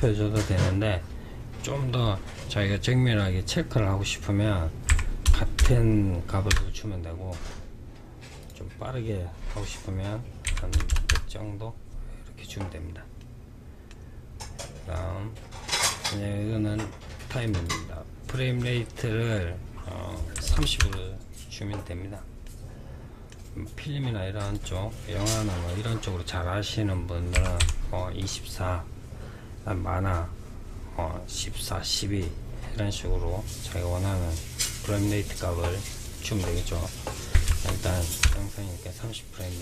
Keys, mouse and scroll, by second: 4.9 KP_0, 7.7-10.2 drag, 10.2 KP_0, 12.5-14.3 middle drag, 14.3-16.7 scroll down 1, 16.7-19.8 drag, 21.7-23.7 middle drag, 23.7-26.7 drag, 39.0-39.6 middle drag.